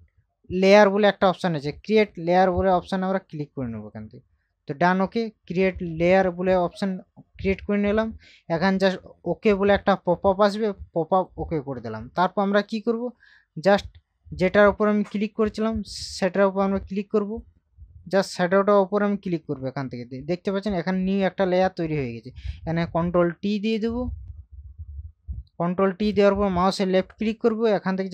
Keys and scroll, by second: 23.3 ctrl+t.